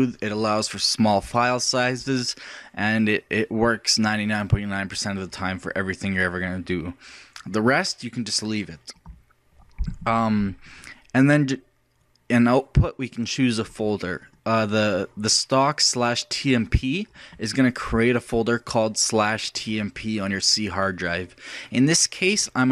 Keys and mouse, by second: 4.5-22.7 drag.